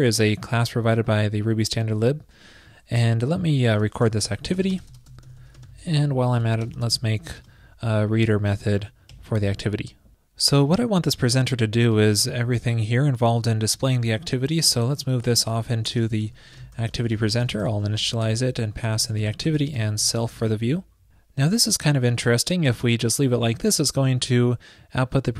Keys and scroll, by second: 6.4 super+., 6.5 super+Right, 14.7 super+x, 15.2 ctrl+shift+>.